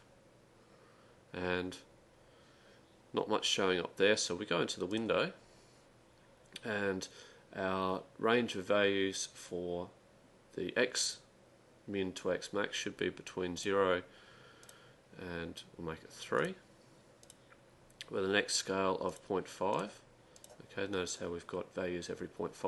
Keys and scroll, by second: 16.2-17.0 typing, 20.2-21.0 typing.